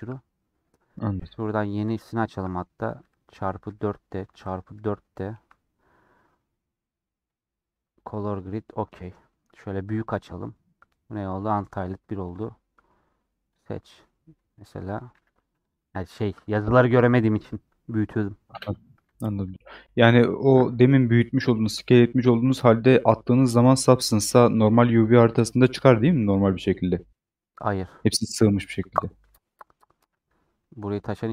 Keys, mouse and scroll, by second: 3.9 click, 12.3-14.7 drag, 14.7 Tab, 19.5 scroll down 1, 19.6-24.3 middle drag, 25.9-30.5 middle drag, 30.5 Tab.